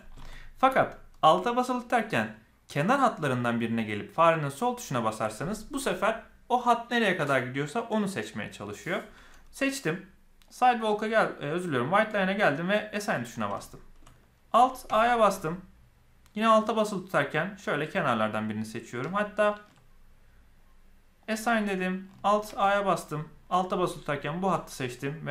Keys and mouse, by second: 0.3 alt+a, 4.4 alt+click, 10.4 click, 11.7 click, 12.8 click, 13.6 shift+middle click, 14.8 alt+a, 17.5 alt+click, 21.1 click, 22.4 alt+a, 24.0 alt+click.